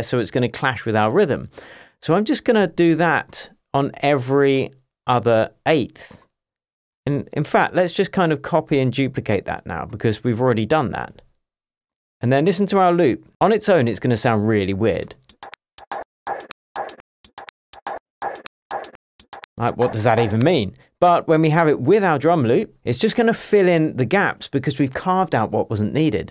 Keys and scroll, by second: 4.0 BackSpace, 7.1 BackSpace, 15.1 space, 20.6 space.